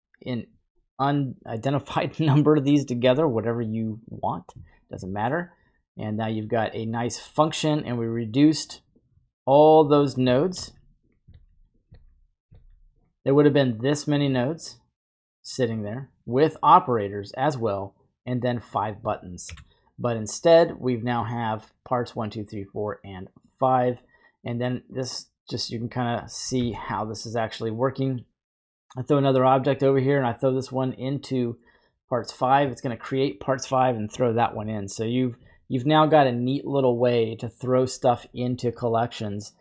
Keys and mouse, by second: 4.0 click, 5.0 middle click, 5.7 middle click, 8.9-9.8 drag, 10.5 shift+d, 11.0 click, 11.4 shift+d, 11.7 click, 12.0 shift+d, 12.6 shift+d, 15.7-18.7 drag, 19.4 Delete, 21.3-24.0 drag, 25.1 click, 28.1 shift+a, 29.6-32.1 drag, 35.1 right click, 36.1-38.8 drag, 38.9-39.6 right drag.